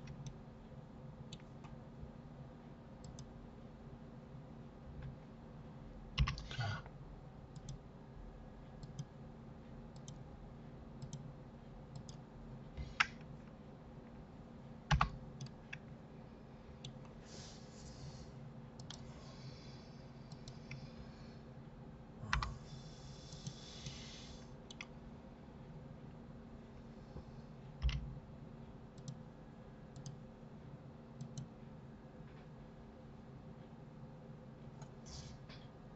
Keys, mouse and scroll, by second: 3.0 click, 12.4-15.4 scroll down 3, 15.4-18.4 middle drag, 18.7-20.4 drag, 22.3 g, 23.8-26.9 middle drag, 27.8 k.